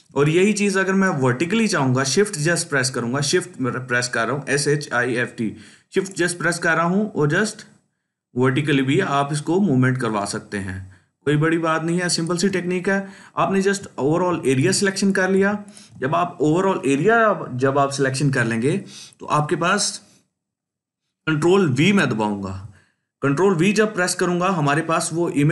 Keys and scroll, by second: 21.7 ctrl+v.